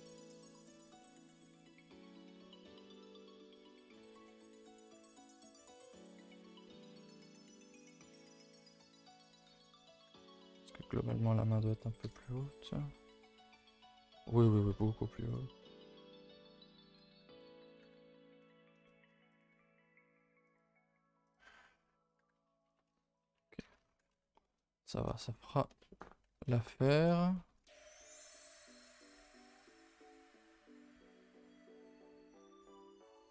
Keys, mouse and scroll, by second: 0.5 s, 1.1 r, 2.3-4.4 middle drag, 4.4 r, 4.8 g, 5.5 r, 6.2 shift+middle click, 6.7 scroll down 1, 7.0 s, 7.8 g, 8.3 1, 8.5 click, 8.7 g, 9.2 middle click, 9.8 click, 10.0 g, 10.8 click, 11.0 g, 12.0 KP_0, 12.6 z, 13.3 shift+middle click, 13.6 scroll up 1, 13.9 scroll down 2, 14.4 click, 14.7 g, 15.9 click, 16.6-17.1 scroll up 1, 17.1 g, 17.6 click, 17.8 g, 18.6 scroll down 1, 18.8 shift+middle click, 19.3 click, 19.4 g, 21.2 click, 21.4-23.8 typing, 22.1 click, 23.4 Tab, 23.8 scroll down 5, 24.1 ctrl+s, 24.3 middle drag, 24.6 scroll down 2, 24.8 middle drag, 25.0-25.8 scroll up 7, 25.8 shift+middle drag, 26.0-27.6 scroll up 8, 26.3 Tab, 26.4 middle click, 26.8 shift+middle drag, 27.3 shift+middle click, 27.6 a, 27.8 a, 28.1 alt+click, 28.4 s, 30.3 alt+click, 30.9 3, 31.0 click, 31.6 g, 32.5 s, 33.0 r.